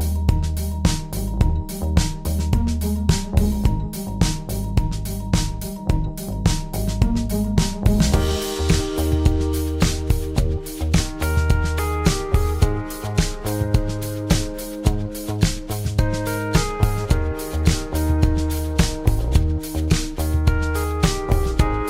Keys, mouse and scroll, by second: 1.5 u, 2.4 alt+shift+click, 3.3 alt+click, 4.0 alt+shift+click, 4.4 alt+click, 4.9 alt+click, 11.0 alt+click, 12.5 alt+click, 13.0 ctrl+alt+click, 14.0 alt+shift+click, 15.5 ctrl+alt+click, 16.0 alt+shift+click, 16.7 alt+click.